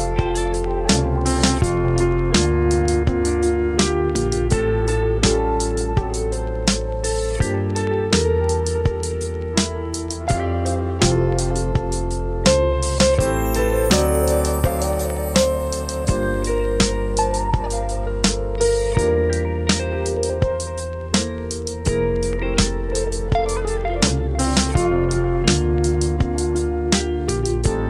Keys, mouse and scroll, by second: 0.6 click, 0.7-1.3 scroll up 1, 1.3 right click, 1.7-2.9 scroll down 1, 2.9 click, 3.2 scroll down 1, 3.5-4.2 scroll up 1, 4.3 ctrl+shift+click, 5.6-6.1 typing, 7.6 Return, 9.5 click, 13.8 scroll down 1, 14.0 scroll up 1, 14.3-17.0 right drag, 17.6 click, 18.6 right click, 19.1 scroll down 1, 19.2-20.2 scroll up 1, 20.2 click, 21.4-24.4 right drag, 24.4-24.7 scroll up 1, 24.7 right click, 25.1 scroll down 1, 25.3 scroll up 1, 25.4 right click, 26.3 scroll down 1, 26.5 scroll up 1, 26.7 right click, 27.0 scroll down 1, 27.1-27.5 scroll up 1, 27.5 right click.